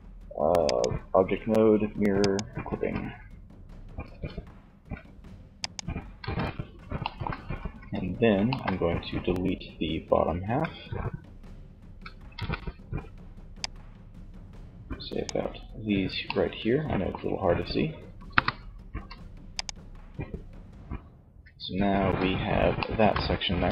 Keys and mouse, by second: 1.4 click, 1.8 Tab, 3.3 Tab, 3.9 ctrl+s, 5.3 z, 6.9 z, 9.6 a, 11.1 a, 11.6 b, 17.3 KP_1, 18.1 x, 20.3 Tab, 21.2 z, 22.7 Tab.